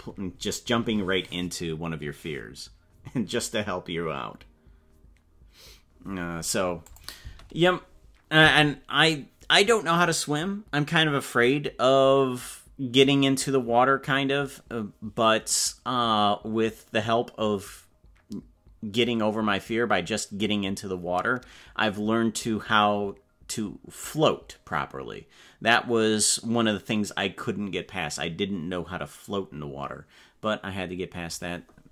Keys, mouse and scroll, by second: 6.9 click, 7.2 space, 8.4 space.